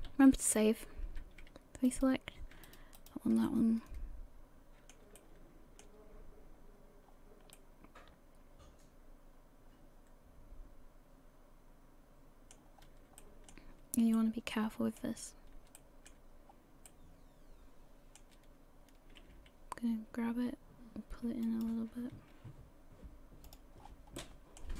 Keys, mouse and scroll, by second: 0.1 ctrl+s, 1.9 alt+right click, 2.0 alt+right click, 2.7 shift+right click, 3.0 shift+right click, 3.1 shift+right click, 3.5 middle click, 5.2 shift+middle click, 6.7-7.2 scroll down 3, 7.6 middle click, 12.8 scroll up 2, 13.2 shift+middle click, 13.7-14.2 scroll up 1, 14.2 middle click, 15.2-15.7 scroll up 1, 15.8 shift+middle click, 16.3-16.9 scroll up 2, 16.9 middle click, 19.2 g, 22.3 r, 23.8-24.2 scroll down 5, 24.2 middle click.